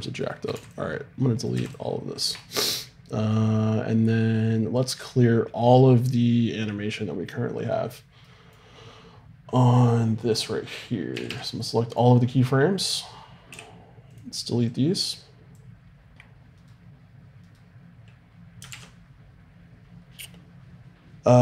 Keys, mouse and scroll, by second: 0.5 x, 1.5 x, 3.2-8.8 drag, 14.2 a, 14.7-16.6 drag, 18.7 alt+r.